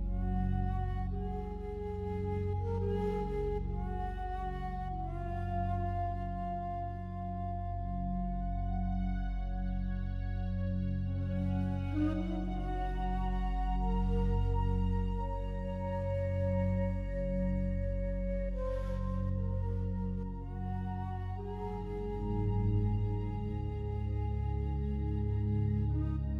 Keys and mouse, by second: 1.2-2.1 drag, 2.1 g, 3.3 Escape, 5.1 click, 5.8 click, 6.8 click, 11.1 click, 12.2 click, 14.4 click, 16.5 click, 16.9 click, 17.4 click, 18.4 g, 19.6 Escape, 20.7 click, 21.2 click, 21.8 click, 22.8 click, 25.0 click.